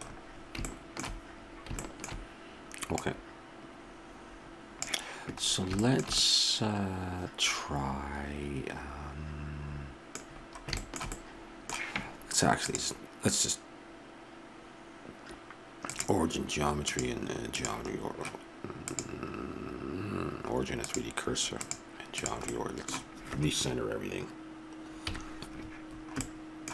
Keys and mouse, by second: 3.0 middle click, 5.5 middle click, 8.2-10.3 middle drag, 12.7-14.5 drag, 14.5-16.0 middle drag, 16.9-18.8 drag, 18.9-22.5 drag, 22.5-23.8 middle drag, 25.1 KP_Decimal.